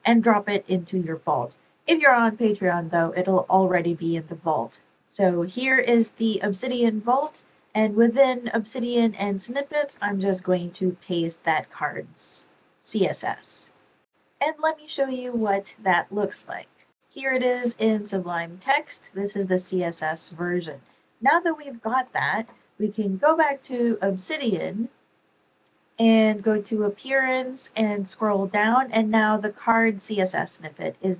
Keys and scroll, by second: 9.9 super+v, 20.7 super+Tab, 21.7 super+Tab.